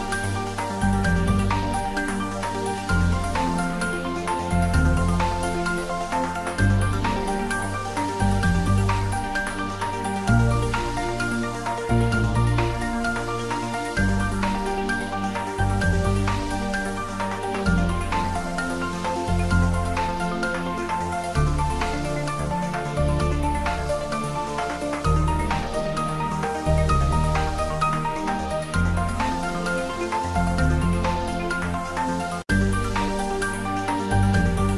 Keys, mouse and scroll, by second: 0.0 click, 1.0 alt+h, 1.4-3.0 scroll down 2, 3.0 click, 4.6 shift+click, 7.2 ctrl+j, 8.4-8.7 scroll up 2, 8.7-9.9 middle drag, 9.9 Tab, 10.7 ctrl+r, 11.4 click, 12.9 ctrl+r, 13.7 click, 15.1 Tab, 15.6 scroll down 1, 15.9 middle click, 17.0 scroll up 1, 17.4 Tab, 18.1 ctrl+r, 18.3 click, 19.0 click, 19.3 ctrl+r, 20.0 click, 21.1 Tab, 21.4 middle click, 21.8 scroll down 1, 22.7 click, 23.7 g, 24.3 click, 24.9 s, 25.9 click, 27.7 3, 28.3 scroll down 1, 28.6 middle click, 29.3 scroll down 1, 29.9 s, 30.4 click, 30.7 g, 32.8 click, 33.1 scroll down 1, 34.7 scroll up 1.